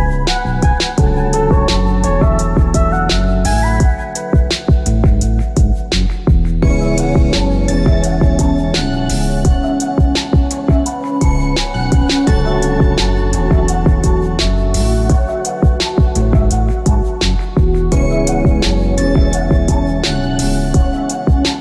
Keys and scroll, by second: 14.5 Return.